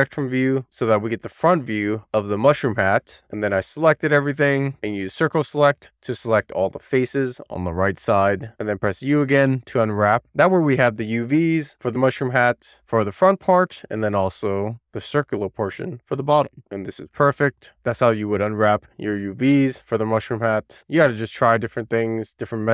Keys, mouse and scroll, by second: 0.8-2.3 scroll up 1, 2.3 scroll up 2, 2.4 click, 2.7 middle click, 3.2 click, 3.4 middle click, 4.0 scroll down 1, 4.1 scroll up 1, 4.2 middle click, 4.3 click, 4.7 c, 5.3 3, 5.4 right click, 5.9 c, 8.3 right click, 8.5 u, 9.8-10.5 scroll down 1, 10.5-11.4 scroll up 1, 11.4 scroll up 1, 11.6-13.3 scroll down 1, 13.3 middle click, 14.1 shift+middle click, 14.4 middle click, 15.4 shift+click, 18.2 middle click, 21.8 click.